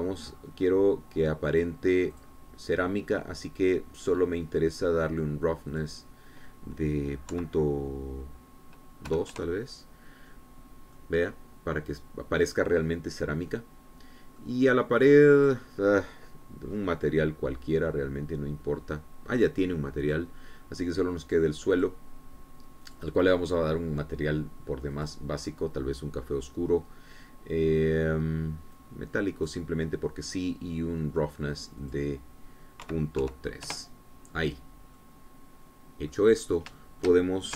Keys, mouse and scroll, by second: 0.1 shift+click, 2.5 click, 3.2 click, 4.7-5.2 scroll down 2, 6.7 click, 8.3 KP_Decimal, 10.1 KP_2, 10.4 KP_Enter, 12.0-14.1 drag, 14.9-15.2 scroll down 2, 15.4 click, 16.4 click, 17.7 middle click, 21.1 click, 22.3 click, 22.8 click, 23.9 click, 26.0 click, 26.4-26.7 scroll down 1, 29.8 click, 31.1-32.8 scroll down 1, 32.8 click, 33.9 KP_Decimal, 34.3 KP_3, 34.7 KP_Enter, 36.0-37.3 middle drag.